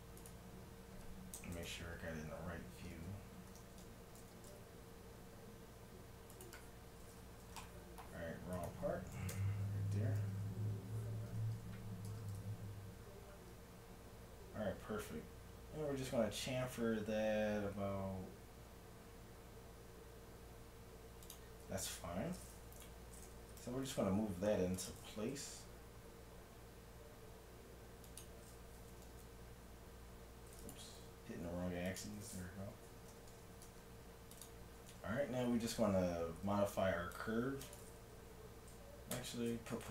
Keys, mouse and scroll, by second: 0.2-1.7 right drag, 1.7 KP_7, 3.7 z, 4.3 ctrl+b, 7.4 z, 7.6-8.6 middle drag, 9.2 KP_1, 9.4 KP_7, 10.4 x, 11.3 z, 12.1 ctrl+b, 22.8 Tab, 23.5 g, 25.4 g, 29.0 g, 30.9 g, 33.2 Tab, 33.7 ctrl+Tab, 34.8 a, 35.3-37.3 middle drag, 36.5 c, 37.7-39.4 drag, 39.2 o.